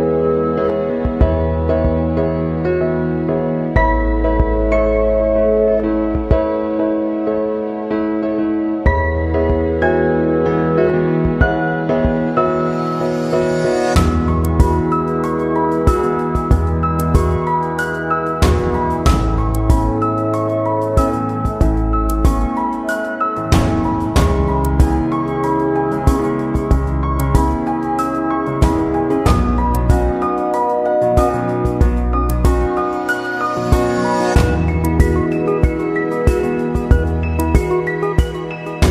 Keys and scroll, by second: 19.7 ctrl+-, 20.1 ctrl+0, 29.2 Left, 35.0 ctrl+-, 35.8 ctrl+0.